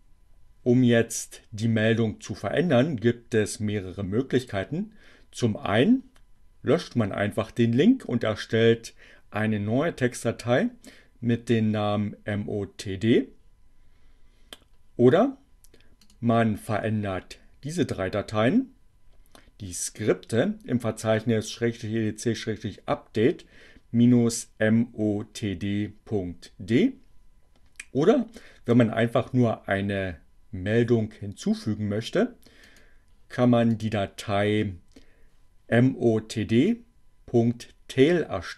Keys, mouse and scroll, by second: 30.5-32.9 drag.